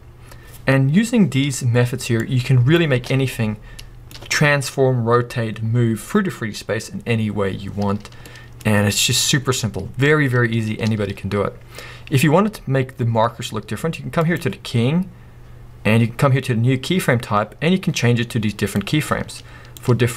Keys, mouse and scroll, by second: 2.2-3.8 drag, 3.0 space, 3.5 scroll down 2, 3.8-8.5 middle drag, 7.9 scroll up 2, 10.9 space, 13.5-14.2 middle drag, 14.2-15.9 drag, 16.5 click, 17.5-18.1 drag, 18.7 click, 19.1-19.4 drag.